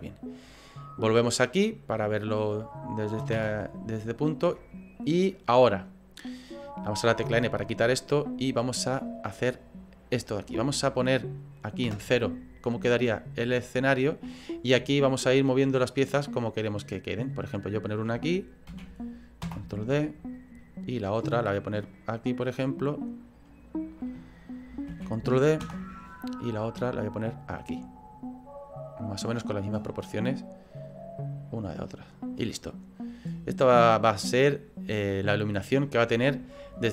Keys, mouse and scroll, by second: 13.6 shift+middle click, 14.8 scroll up 3, 14.9 shift+middle click, 15.6 click.